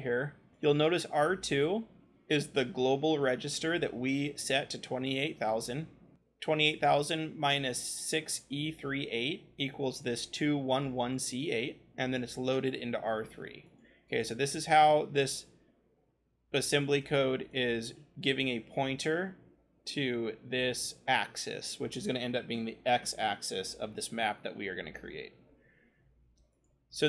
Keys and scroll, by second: 12.9-17.1 scroll.